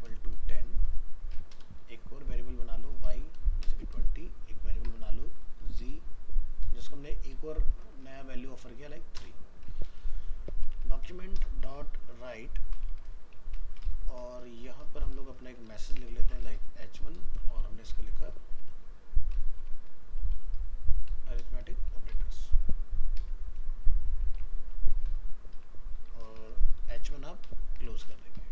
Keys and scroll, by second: 8.1 ctrl+s.